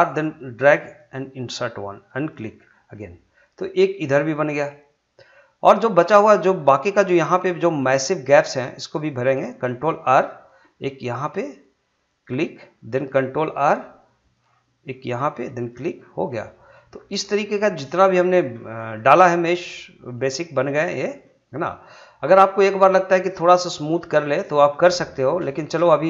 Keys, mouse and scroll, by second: 1.0 click, 2.6 scroll down 1, 2.9-8.9 middle drag, 10.2 ctrl+r, 11.2 click, 13.6 ctrl+r, 14.8 click, 16.0-16.3 scroll down 1, 16.3 middle click, 16.9 scroll up 1, 17.2-18.7 middle drag, 18.7 scroll up 1, 18.9-20.4 middle drag, 20.4 scroll up 1, 20.7 middle click, 21.0 scroll down 1, 21.2 middle click, 22.8 middle click, 23.1 scroll down 1, 23.4 middle click, 24.1 scroll down 1, 24.5 shift+middle click, 24.9 middle click, 25.3 scroll up 2, 25.5 shift+middle click.